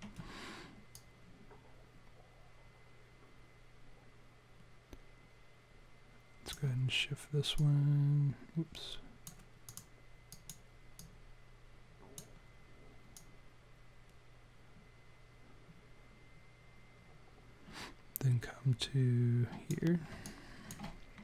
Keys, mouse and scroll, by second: 1.0 click, 7.6 click, 9.6 click, 10.3 click, 11.0 click, 13.2 click, 20.2 alt+click.